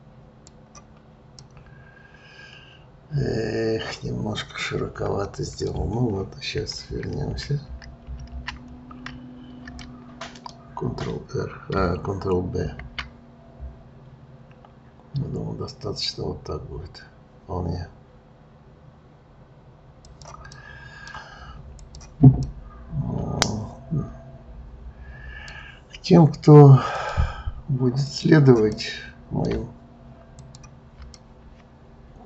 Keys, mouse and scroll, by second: 1.4-4.5 middle drag, 6.6 ctrl+z, 6.9 ctrl+z, 7.3 ctrl+z, 7.7 ctrl+z, 9.8-12.5 middle drag, 12.5 ctrl+b, 20.5-21.8 middle drag, 21.8 click, 22.4-25.5 middle drag, 26.9 click, 28.0 click, 28.7-30.3 middle drag, 30.3 ctrl+click, 31.1-32.2 middle drag.